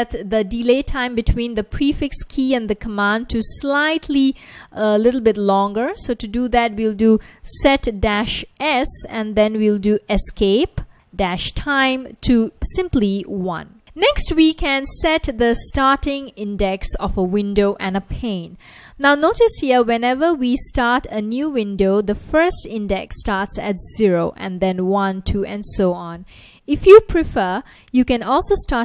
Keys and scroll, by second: 5.5-6.6 typing, 7.9-12.6 typing, 12.9 super+s, 14.2 Return, 18.2 super+Tab, 21.5 F1, 22.6 F1, 23.7 F1, 28.4 F1.